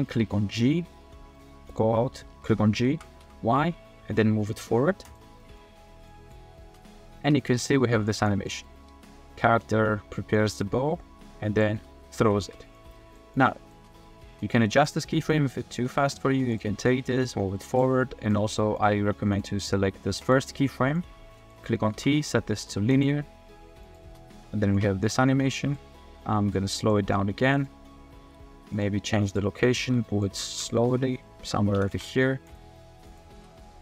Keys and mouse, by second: 1.3-1.7 middle drag, 2.9 g, 3.2 y, 5.0-5.6 drag, 6.1 click, 6.6 space, 7.1 space, 8.1 drag, 8.5 drag, 8.9 space, 9.4 space, 10.6-11.6 drag, 11.7 space, 12.4 space, 12.7 click, 13.0 click, 13.3 click, 13.7 space, 14.2 space, 14.4 click, 15.1-16.1 drag, 16.5 click, 17.0 g, 17.7-18.5 drag, 18.8 click, 20.2 click, 21.0 click, 21.9 t, 23.8 click, 24.0 space, 24.6 space, 24.8-25.7 drag, 26.8 click, 27.0 g, 28.2 g, 29.3 click, 30.0 middle click, 30.7 shift+middle drag, 31.7 g, 31.9 y, 32.5-33.2 drag, 33.3 space.